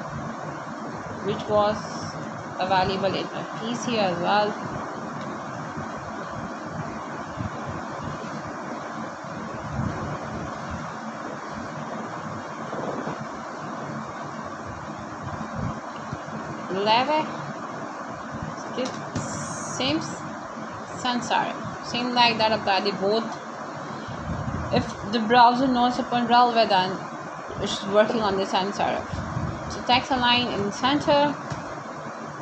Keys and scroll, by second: 3.1-4.3 typing, 9.9 Return, 14.1-15.5 typing, 15.9 Page_Down, 16.9 Return, 18.0 BackSpace, 19.4 Right, 19.7 BackSpace, 22.2 ;, 22.5 Return, 24.0-25.2 typing, 29.1 t, 30.3 -, 30.7 a, 31.4 Return.